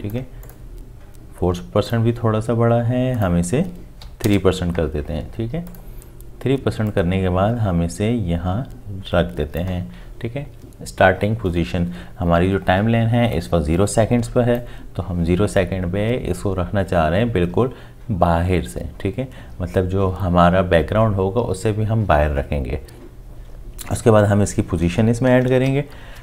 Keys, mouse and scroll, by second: 4.0 3, 4.2 Return, 25.7 shift+p.